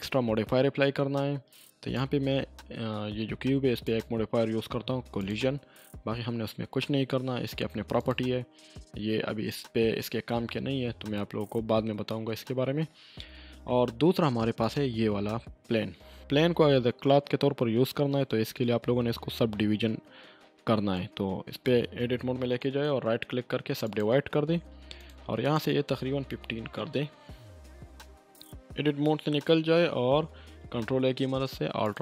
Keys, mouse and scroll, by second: 3.8 click, 8.0 click, 10.4-11.4 scroll down 2, 11.4 scroll up 1, 12.3-13.3 scroll down 1, 13.3 scroll up 1, 14.6 click, 22.3 click, 22.4 Tab, 22.6 right click, 23.8 click, 23.9 click, 26.3 5, 26.7 Return, 27.5 click, 28.0 Tab, 30.6 ctrl+a, 31.8 click.